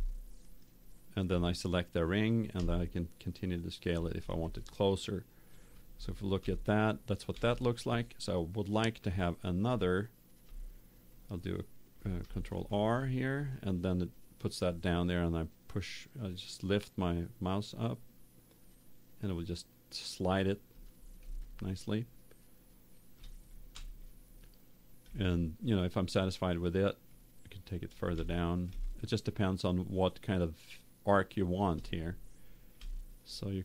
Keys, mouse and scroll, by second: 0.3 middle click, 1.3 right click, 2.5 s, 4.0 click, 4.4 right click, 4.5-5.9 middle drag, 6.4 Tab, 7.2 Tab, 12.5 ctrl+r, 20.8 click, 21.4 middle click, 21.5 click, 21.6 middle click, 21.8 click, 22.6 middle click, 23.7 Tab, 25.0 Tab, 28.1 Tab, 28.9 middle click, 32.7 Tab.